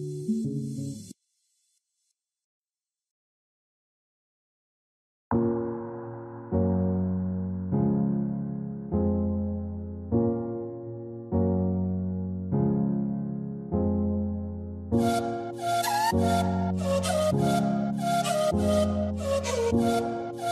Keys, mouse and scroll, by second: 0.0 ctrl+middle click, 0.5 alt+scroll up 1, 5.2 alt+v, 5.5 6, 5.8 Tab, 6.3 7, 7.2 middle click, 8.1 scroll up 1, 10.9 middle click, 12.7 scroll down 1, 12.9 middle click, 13.1 scroll up 1, 14.5 middle click, 15.8 alt+w, 16.5 middle click, 16.8 alt+w, 17.0 middle click, 17.6 alt+w, 18.3 double click.